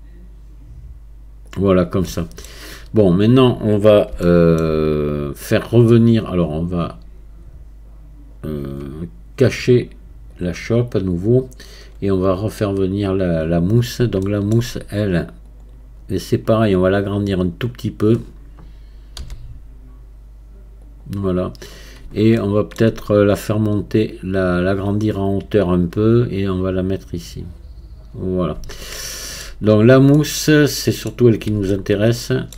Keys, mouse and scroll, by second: 2.1 middle click, 2.5-4.3 scroll down 1, 4.3-7.3 shift+middle drag, 10.4-13.8 drag, 13.8-14.2 scroll up 1, 14.2-15.5 shift+middle drag, 15.5-17.7 drag, 17.7-19.2 scroll up 1, 19.2 s, 22.4-23.8 shift+middle drag, 23.8-28.4 drag, 29.0-31.2 shift+middle drag, 31.2-31.7 scroll down 2, 31.7-32.5 shift+middle drag.